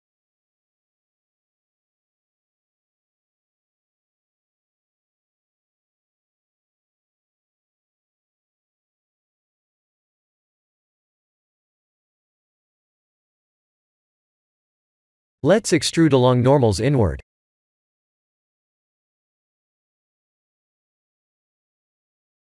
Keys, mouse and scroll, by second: 0.5 shift+z, 5.0 middle click, 5.8-7.2 scroll down 4, 7.2 Tab, 7.7 middle click, 9.5 shift+z, 10.6 Tab, 11.8 shift+click, 12.2 middle click, 13.0 shift+click, 13.3 middle click, 14.3 middle click, 15.7 click, 17.3 click, 20.3 click.